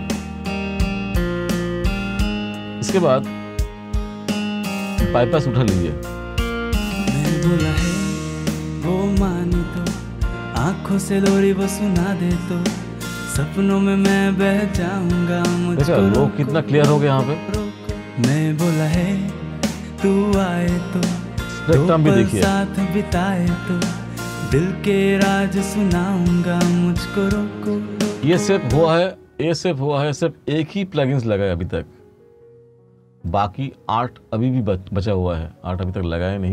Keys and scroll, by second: 28.4 space.